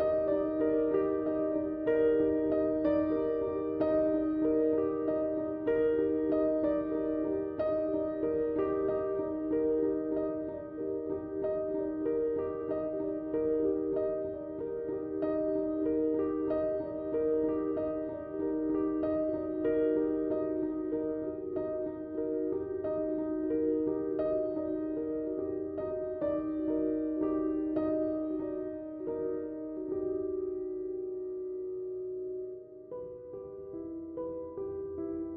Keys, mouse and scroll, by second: 1.5 space, 1.8 click, 1.9 space, 2.8 click, 3.7 click, 4.0 space, 4.6 click, 4.7 space, 5.5 click, 6.4-16.2 drag, 16.8 space, 16.9 click, 18.9 typing, 20.6-35.3 drag, 20.6 typing.